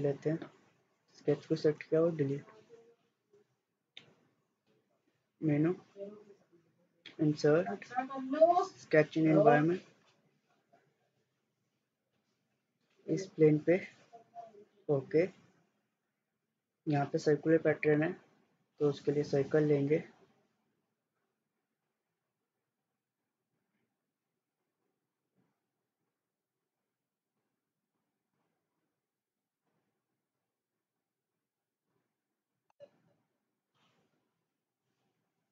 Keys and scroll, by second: 1.8 Delete.